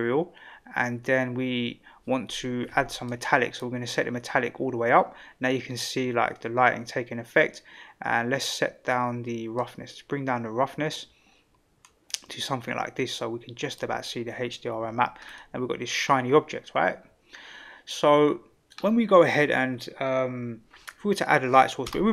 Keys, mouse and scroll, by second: 3.0-3.7 drag, 9.5-13.8 drag, 15.2 scroll down 1, 15.4-18.7 middle drag.